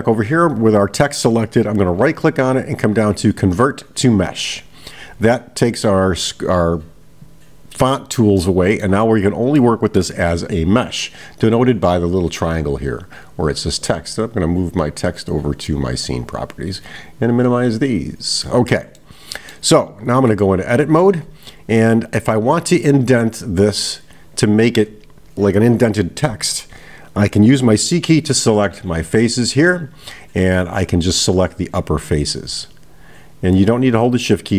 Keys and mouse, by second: 0.5 click, 8.4-9.0 middle drag, 9.6 middle click, 13.3-15.5 drag, 16.9 click, 18.0 click, 19.0-19.8 middle drag.